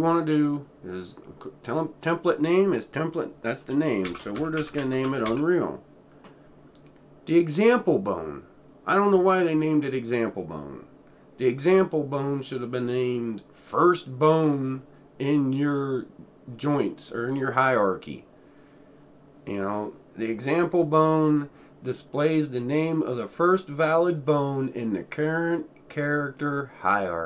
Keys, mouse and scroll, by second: 0.0-0.4 drag, 0.6-2.4 drag, 3.7-7.5 drag, 3.8-5.8 typing.